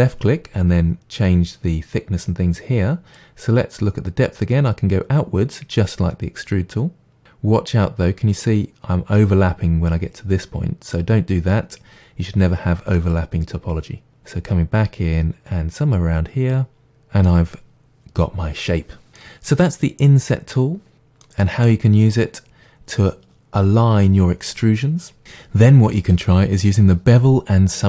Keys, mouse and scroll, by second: 0.6 click, 3.2-10.5 drag, 10.5-13.2 middle drag, 13.2-16.8 drag, 16.8-27.8 middle drag.